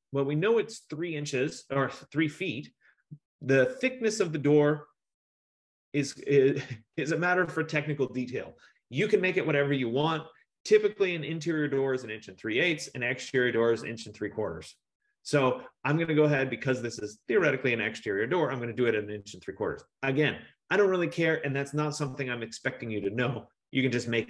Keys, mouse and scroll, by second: 20.0 F15.